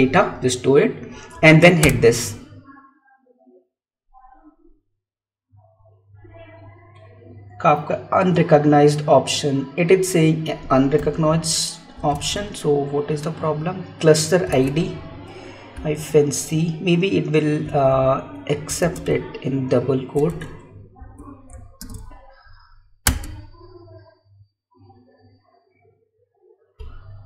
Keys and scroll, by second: 11.0 Up, 11.1 Left, 12.6 Tab, 14.8 Tab, 15.6 Left, 20.1 Right.